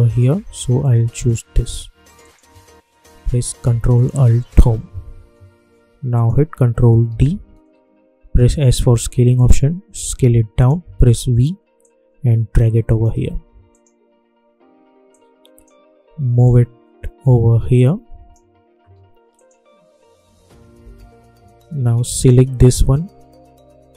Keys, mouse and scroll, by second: 4.4 ctrl+alt+Home, 6.1 click, 7.0 ctrl+d, 8.3 s, 9.3-11.0 drag, 11.0 v, 11.8-19.3 drag, 20.7 p, 22.0-23.9 drag.